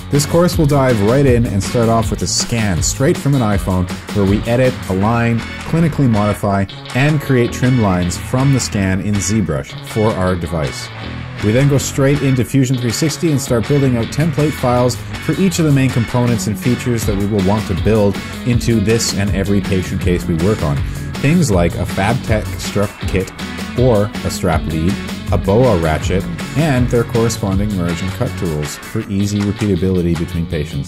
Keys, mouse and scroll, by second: 1.5 Tab, 8.0 w, 11.2 y, 11.6 v, 14.9 right click, 15.1 click, 15.6 right click, 15.7 click, 20.5 right click, 20.6 click, 23.3 right click, 23.4 click, 23.5 h, 25.1 Return, 26.5 shift+middle click, 27.3 click, 27.9 right click, 28.0 click, 28.3 right click, 28.5 click, 30.1-30.8 typing.